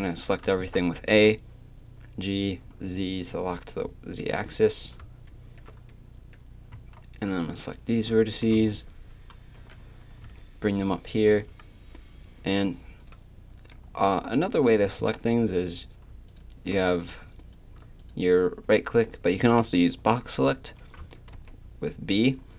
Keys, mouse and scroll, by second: 0.4 KP_3, 1.1 g, 6.7 a, 8.5 KP_3, 9.6 g, 11.3 a, 15.0 a, 21.3 b.